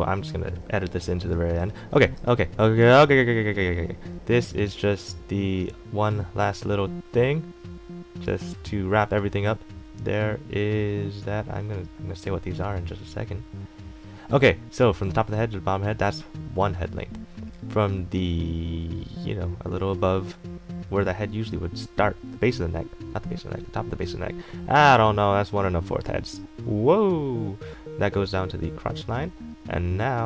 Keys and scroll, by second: 1.5 x, 1.8 a, 8.4 ctrl+z.